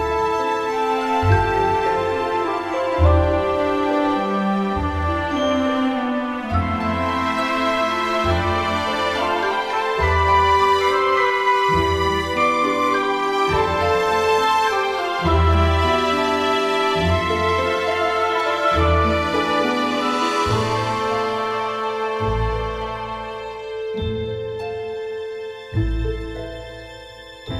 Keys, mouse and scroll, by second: 1.6 ctrl+Tab, 2.7 KP_1, 4.4 s, 6.7 s, 8.4 e, 10.7 e, 12.5 s, 16.0-19.5 typing, 20.3 click, 21.3 e, 22.4 alt+n, 23.2 alt+m, 25.4 ctrl+Tab.